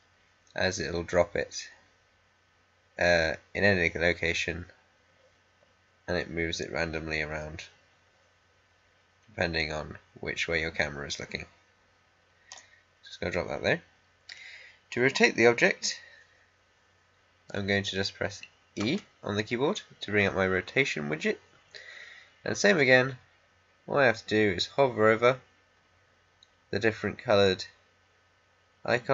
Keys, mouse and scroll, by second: 18.8 e.